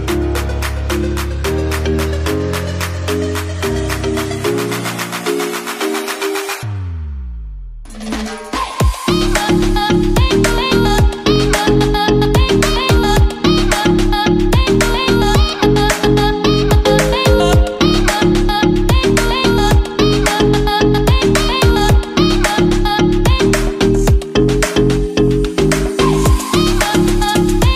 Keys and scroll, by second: 6.9 5, 14.0 Right, 18.3 Right, 21.9 Left, 26.7 Right.